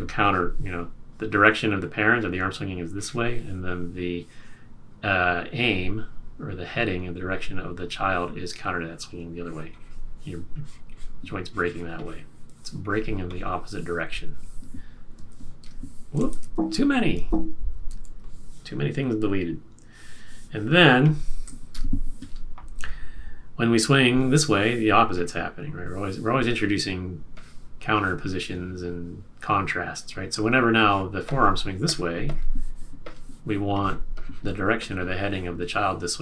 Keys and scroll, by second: 15.1 super+a, 15.6 BackSpace, 16.4 super+a, 17.8 super+z, 21.7 BackSpace.